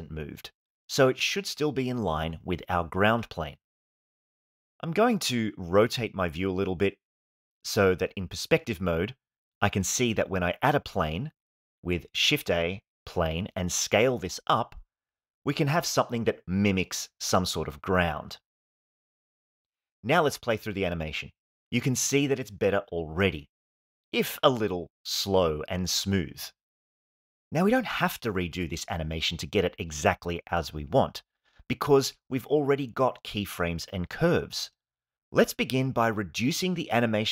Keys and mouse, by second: 1.3 Tab, 4.9-5.8 middle drag, 7.2 middle click, 8.8-10.1 shift+middle drag, 11.9 shift+a, 14.1 Tab, 14.9 s, 17.3 click, 17.4 Tab, 17.4 s, 17.6 x, 18.5 s, 18.8 y, 19.6 click, 19.8-20.8 middle drag, 21.1 click, 21.4 space, 27.5 space.